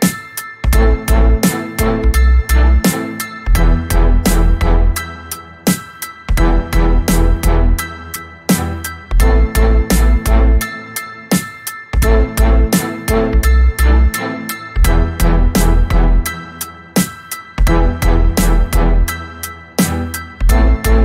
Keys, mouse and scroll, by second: 0.4 ctrl+click, 1.3 ctrl+d, 1.7-3.9 ctrl+drag, 4.0-5.8 ctrl+drag, 6.0 ctrl+d, 6.3-8.0 ctrl+drag, 8.2 ctrl+shift+click, 9.2 ctrl+shift+d, 10.3-13.3 ctrl+drag, 14.1 5, 15.4 click, 18.3-19.4 ctrl+scroll up 6, 20.5 space.